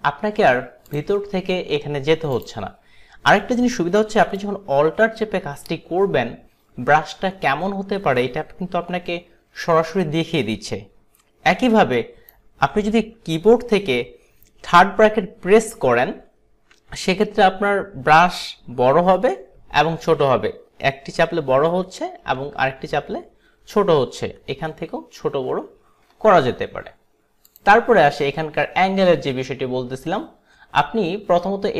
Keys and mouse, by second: 0.9 click, 2.4 click, 4.5 alt+right click, 27.6 click.